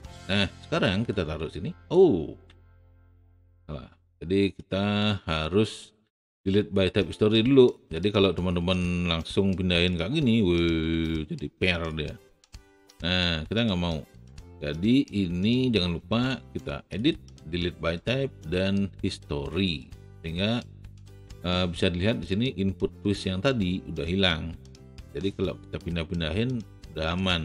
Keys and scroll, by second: 2.6 z, 12.7 ctrl+z.